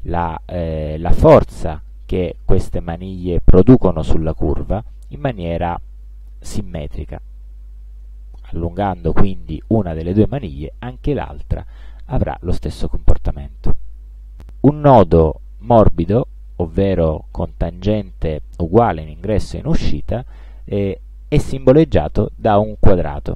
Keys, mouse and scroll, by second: 6.9-9.3 drag, 10.6-12.1 drag.